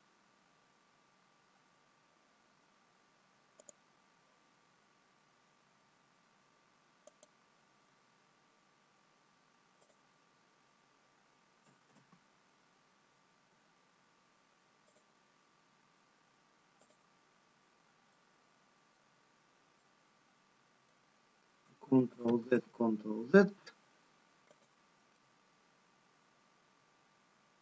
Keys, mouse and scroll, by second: 0.5 click, 0.5-2.0 scroll up 3, 2.2 scroll down 2, 4.3 click, 8.5 click, 8.5 x, 11.8 ctrl+z, 13.6 x, 16.8 x, 18.1 middle click, 19.8 middle click, 19.8-21.7 scroll down 2, 23.5 ctrl+z.